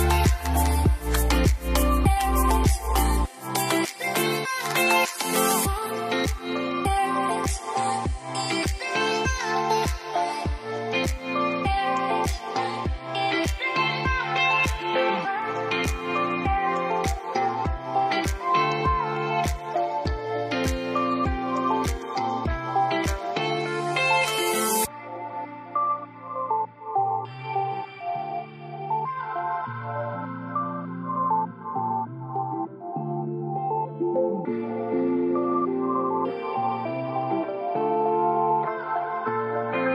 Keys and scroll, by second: 8.0 5, 8.1 Return, 12.8-13.9 typing, 17.2 ctrl+d, 30.7 typing, 30.8 Return, 35.0-35.8 typing.